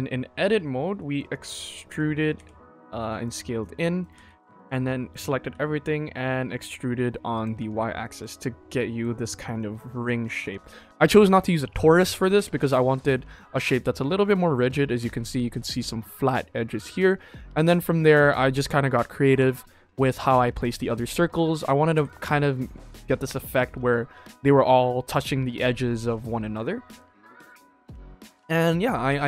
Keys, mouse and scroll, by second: 0.9 middle click, 1.4 KP_1, 1.8 e, 3.5 middle click, 4.1 a, 4.6 middle click, 5.4 e, 7.5 Tab, 7.9 shift+middle drag, 8.3 scroll up 1, 8.5 scroll down 1, 8.6-8.9 middle drag, 9.5 middle drag, 10.0 shift+middle drag, 10.5 ctrl+s, 11.1 middle drag, 11.9 scroll up 1, 12.1 middle drag, 12.6-13.0 shift+middle drag, 13.3 middle drag, 13.6 KP_1, 13.9 scroll up 3, 14.3 shift+middle click, 16.7-17.3 scroll down 3, 17.3 scroll up 2, 17.7-18.0 shift+middle drag, 18.1-18.5 middle drag, 18.6 scroll down 2, 19.0 middle drag, 20.4 middle drag, 21.0 shift+middle drag, 21.4 KP_1, 21.9 x, 22.4 middle click, 22.8 shift+middle drag, 23.1 scroll up 2, 23.7 scroll down 2, 24.1 scroll up 2, 25.6 shift+middle drag, 26.6-26.9 shift+middle drag, 28.4-29.1 scroll down 4.